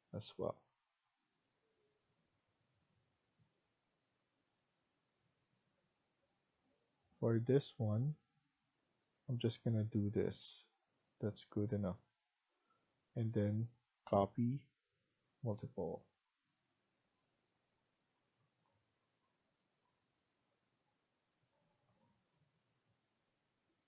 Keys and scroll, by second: 9.8 Escape, 21.2 Escape.